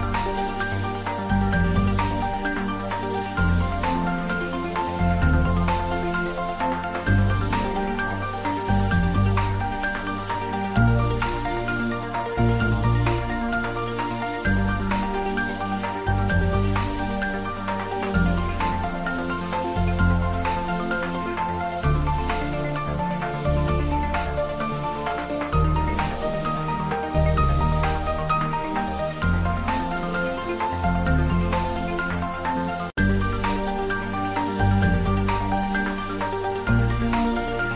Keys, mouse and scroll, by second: 2.8 ctrl+s, 3.3 shift+middle click, 3.7 ctrl+middle click, 4.1-6.9 shift+middle drag, 6.9-10.8 ctrl+middle drag, 10.8 a, 12.6 click, 14.0 a, 14.4 h, 15.1 middle click, 15.6 shift+a, 16.2 click, 17.3 shift+right click, 18.1 click, 18.9 shift+right click, 19.6 click, 20.2 shift+a, 22.0 click, 26.8 Return, 27.6 click, 29.0 ctrl+middle click, 30.2 shift+middle click, 30.7 Tab, 31.3 ctrl+r, 31.7 click, 31.9 s, 32.6 click, 33.0 ctrl+b, 33.5 click, 33.6 ctrl+z, 37.7 click.